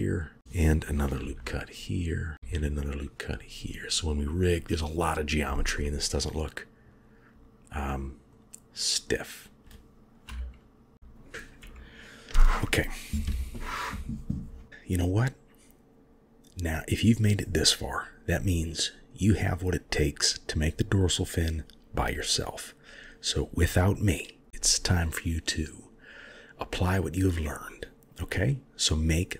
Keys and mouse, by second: 1.0 ctrl+r, 2.3 ctrl+r, 5.6-9.1 middle drag, 10.1 KP_1, 10.9 KP_3, 11.4 KP_1, 15.5 KP_3, 23.4-25.2 middle drag, 26.0 middle click, 27.5 KP_1.